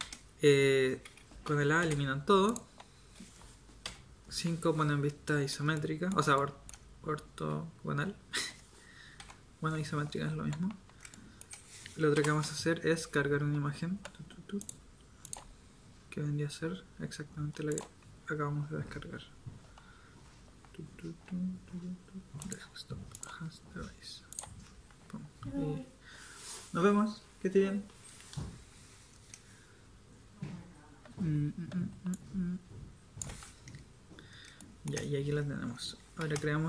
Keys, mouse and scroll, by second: 0.0 a, 1.8 x, 3.8 KP_5, 9.2 KP_7, 12.2 n, 36.2 shift+a.